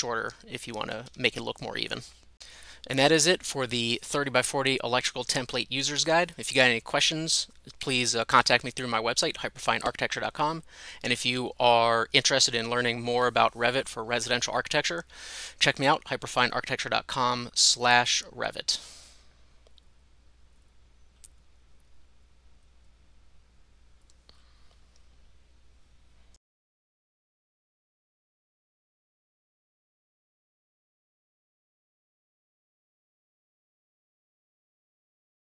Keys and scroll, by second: 1.1 Escape.